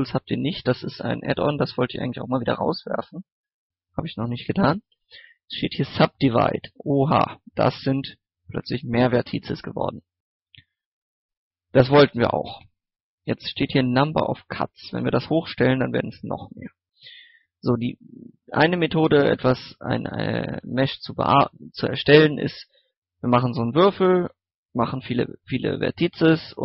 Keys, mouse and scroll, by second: 5.7 click, 6.5-6.8 scroll down 1, 6.8 middle click, 7.1 scroll up 1, 7.3-11.0 middle drag, 12.0-12.3 scroll down 1, 14.5 click, 15.7 middle click, 16.4 scroll up 1, 17.1 Tab, 18.9-19.3 scroll down 2, 19.0 middle click, 19.3 a, 19.5 middle click, 21.6 right click, 21.9 middle click, 22.9 scroll down 1, 23.1 middle click, 23.5 scroll up 1, 23.7 middle click, 25.6 scroll down 1, 25.9 scroll up 1, 26.1 middle click.